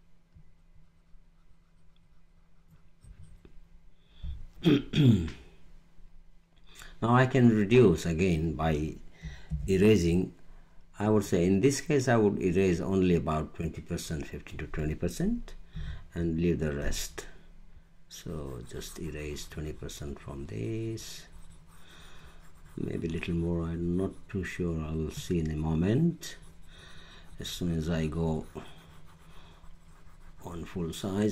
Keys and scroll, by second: 9.4 e.